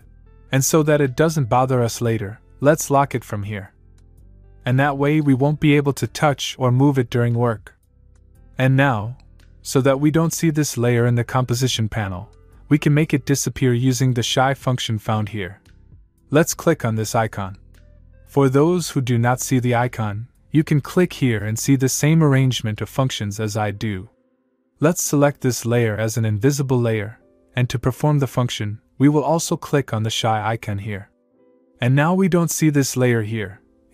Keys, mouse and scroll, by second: 3.7 click, 7.9 click, 9.1 click, 18.5 click, 23.0 click, 24.8 click, 31.2 click.